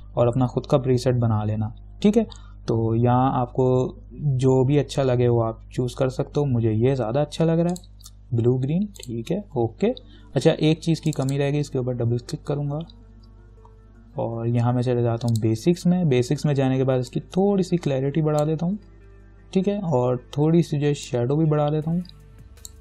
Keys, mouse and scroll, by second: 8.0 click, 15.5-21.3 drag, 17.7-20.7 drag, 21.3-22.8 drag.